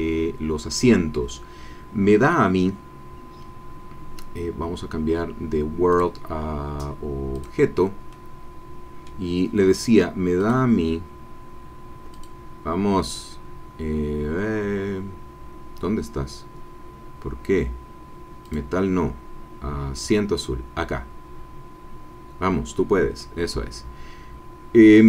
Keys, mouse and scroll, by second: 5.9 click, 7.3 click, 8.1-9.2 middle drag, 10.4-12.5 drag, 18.4 click, 19.9 click, 23.2-25.0 middle drag.